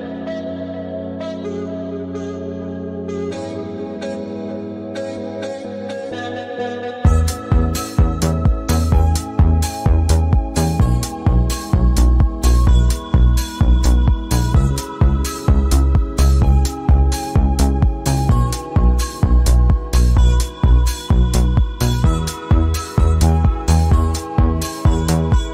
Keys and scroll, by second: 15.6 ctrl+z, 23.9 v.